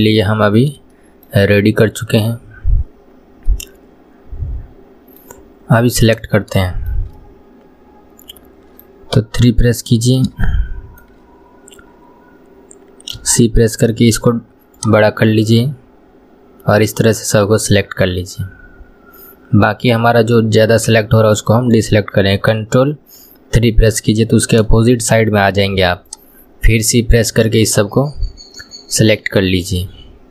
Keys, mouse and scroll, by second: 2.9-3.5 scroll down 1, 3.5-6.1 middle drag, 6.1 click, 6.7-9.2 shift+middle drag, 9.2 KP_3, 10.5-13.2 shift+middle drag, 13.2 c, 23.3 ctrl+KP_3, 24.9 shift+middle click, 25.7 c.